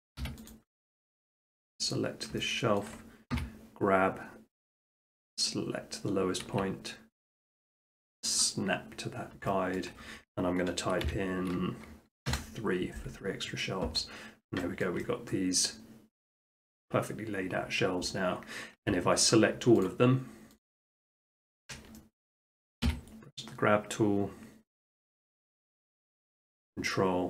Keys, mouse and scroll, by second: 0.2 s, 0.5 click, 1.2 click, 1.9 middle click, 2.0 middle click, 2.8 shift+middle click, 3.0 shift+middle click, 3.3 g, 3.5-3.9 shift+scroll, 5.0-6.0 drag, 6.4-7.5 drag, 8.4 click, 8.7 middle click, 8.9 middle click, 9.0 middle click, 9.2 middle click, 9.8 shift+middle click, 10.9 shift+middle click, 11.1 3, 12.3 Return, 14.8 shift+middle click, 16.8 middle click, 18.8 s, 19.3 click, 19.9 shift+click, 20.7 shift+click, 21.5 shift+click, 22.3 middle click, 22.9 g, 25.6 click.